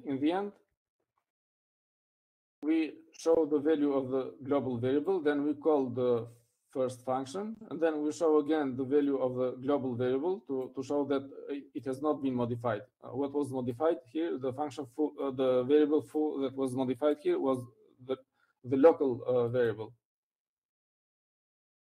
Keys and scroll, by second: 1.9 Down.